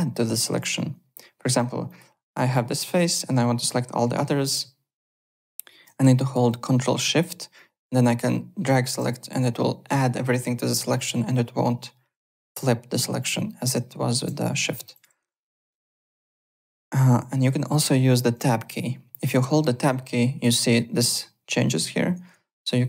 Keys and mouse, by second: 1.8 click, 7.5 ctrl+shift+click, 12.1 click, 12.9 shift+click, 14.9 click, 15.9 alt+Tab, 17.3 alt+Tab, 18.3 Tab, 19.4 Tab, 20.2 Tab, 20.8 Tab, 21.4 Tab, 21.9 Tab.